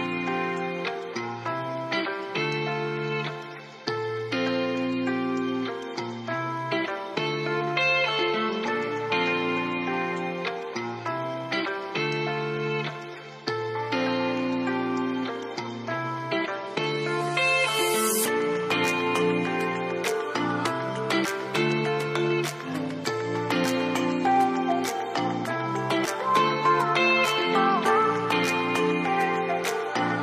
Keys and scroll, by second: 6.6 4, 6.8 Return, 22.6 ctrl+d.